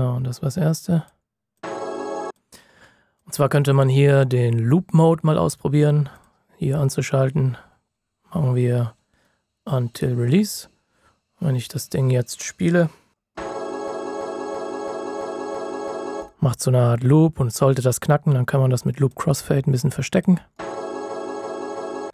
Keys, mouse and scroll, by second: 9.9 click, 19.1 click.